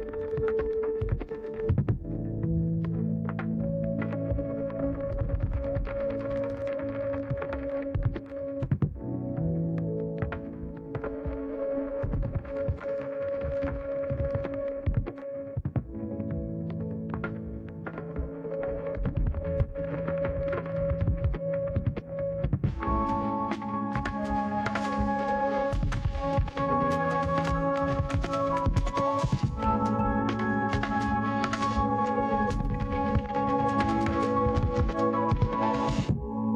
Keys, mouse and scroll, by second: 24.2-30.5 typing.